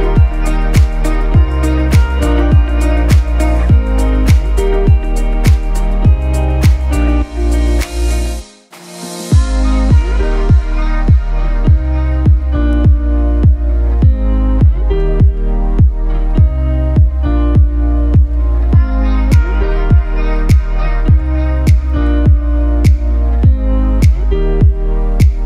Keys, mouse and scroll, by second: 8.4 shift+Up, 9.4 shift+Up, 11.8-25.4 shift+drag.